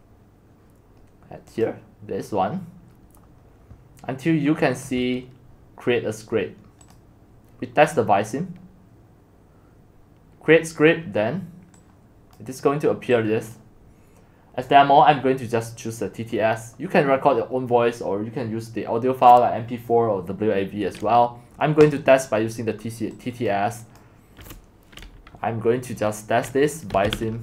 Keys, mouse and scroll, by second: 1.6-2.8 drag, 2.8-3.2 scroll down 3, 3.2 scroll up 1, 3.2-5.0 scroll down 1, 5.0-5.8 scroll down 1, 5.8-6.8 scroll down 1, 6.8 scroll down 1, 6.9-12.1 drag, 12.4-18.6 drag, 21.9 click, 24.0 click, 26.6 click, 26.7-27.4 typing.